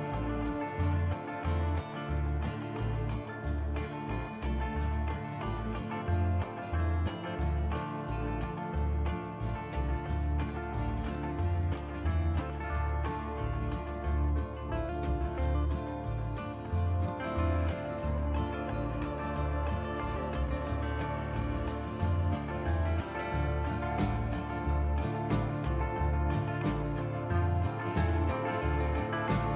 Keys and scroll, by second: 0.8-1.8 typing, 7.1 l, 10.1 ctrl+z, 13.2 b, 16.3 t, 18.5 t, 20.1 ctrl+z, 23.7 t, 24.3 1, 25.4 ctrl+z.